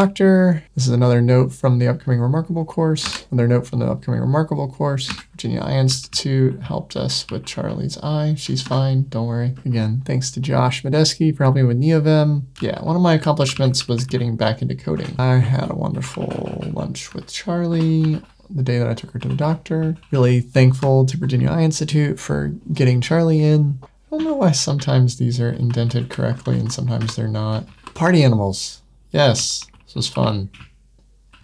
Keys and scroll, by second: 4.9 super+w, 5.3 super+1, 8.5 Tab, 9.5 Escape, 12.6 super+1, 14.9 Escape, 15.4 super+1, 18.0 super+9, 23.8 shift+Tab, 25.8 Up, 26.2 shift+Tab, 26.9 Tab, 27.5 super+9, 29.4 super+1.